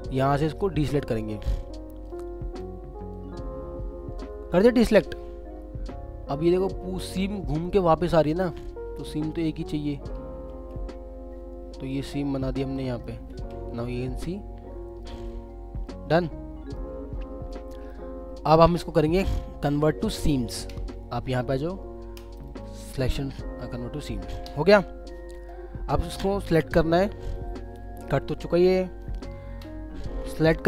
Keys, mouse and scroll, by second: 0.1 middle click, 2.0 alt+click, 3.1 alt+click, 5.8-6.6 scroll, 6.7 scroll up 1, 7.8-8.2 scroll down 1, 8.5 alt+click, 12.7 alt+middle click, 13.3 alt+w, 13.9 alt+middle click, 15.4 scroll up 1, 15.8 alt+middle click, 17.1 scroll down 1, 17.4 alt+scroll up 1, 17.5 alt+middle click, 18.3 alt+middle click, 20.3 alt+scroll up 2, 24.1 scroll down 1, 27.3 alt+middle click, 30.0-30.6 scroll down 1.